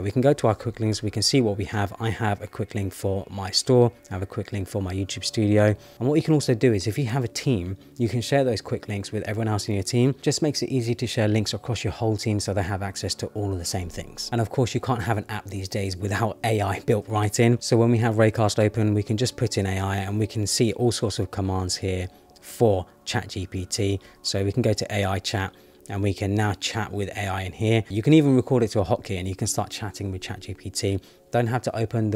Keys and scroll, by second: 0.9 Return, 3.7 Down, 4.7 Up, 20.5 Down, 21.5 Up, 22.1 Down, 22.7 Down, 23.1 Up, 23.6 Up, 24.1 Return, 25.0 Return.